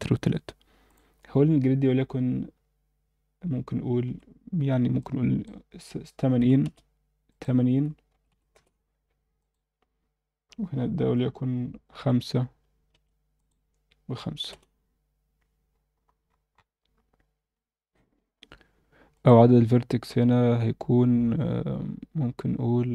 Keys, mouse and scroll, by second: 0.9-6.6 drag, 7.3-8.5 drag, 9.4-12.9 drag, 13.3-14.5 drag, 15.4 scroll down 1, 16.2-17.0 scroll down 8, 17.0-18.3 scroll down 2, 17.5-18.3 scroll up 1, 19.1-22.9 drag.